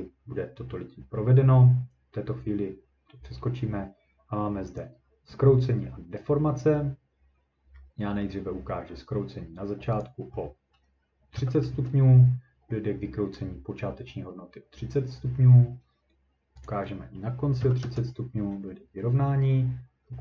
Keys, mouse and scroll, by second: 7.1-7.8 scroll up 3, 8.2 middle click, 10.0 click, 11.3 3, 11.7 Return, 13.4 ctrl+middle click, 16.7 click, 17.6 3, 17.8 Return, 17.9 ctrl+scroll.